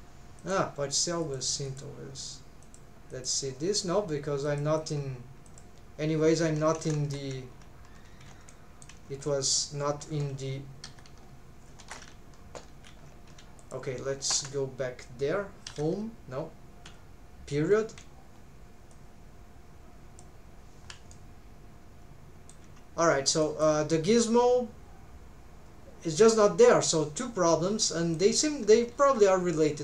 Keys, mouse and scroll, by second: 0.4 click, 1.2 click, 1.6 click, 2.6 click, 3.1 click, 4.5 click, 4.8 click, 5.5 click, 6.8 ctrl+Tab, 8.1 alt+z, 8.5 middle click, 9.2-10.8 scroll down 7, 10.8 Home, 11.8 shift+`, 14.3 Tab, 15.7 Home, 18.0 scroll down 1, 21.1-22.6 middle drag, 23.4 middle click, 27.2-27.8 scroll down 1, 27.8 middle click, 28.4 scroll up 1, 29.0 ctrl+s.